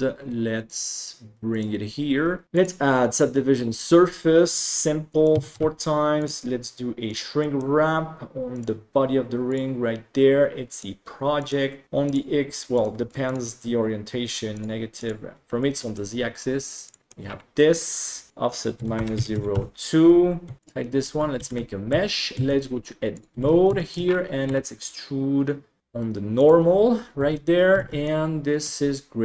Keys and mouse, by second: 2.4 ctrl+s, 2.6-3.8 drag, 4.7 click, 5.1 click, 6.3 click, 7.4 middle drag, 10.8-11.5 drag, 12.0 click, 12.7 click, 13.2 click, 14.5 click, 14.9 click, 15.6-15.9 middle drag, 16.8 click, 17.0 shift+middle click, 18.3-19.5 drag, 20.6 click, 21.4 alt+c, 21.9 Tab, 22.3 a, 23.1 click, 23.4 alt+z, 23.7 shift+click, 24.7 e, 25.8 r, 27.2 Tab, 27.7 alt+z, 28.0-28.6 middle drag.